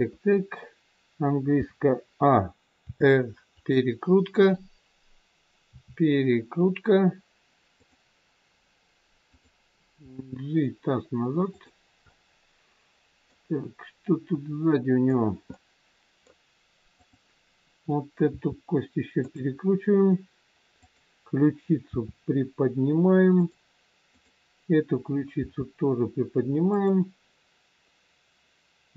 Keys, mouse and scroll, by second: 1.6 a, 2.8 r, 4.4 click, 5.7 r, 9.3 click, 10.0 g, 12.0 middle click, 17.0 middle click, 17.0 click, 18.2 r, 20.7 click, 21.8 r, 24.1 click, 25.4 r.